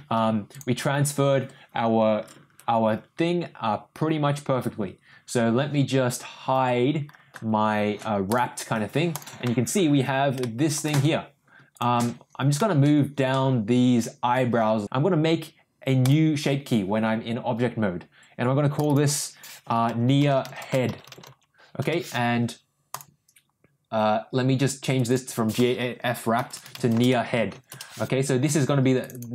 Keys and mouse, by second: 0.5 click, 8.2 click, 9.1 click, 9.4 middle drag, 10.3-10.7 shift+middle drag, 11.7 click, 12.5-14.8 middle drag, 16.0 click, 18.7 click, 18.8-22.3 drag, 25.0 click, 25.6-28.3 shift+drag, 29.0-29.3 drag.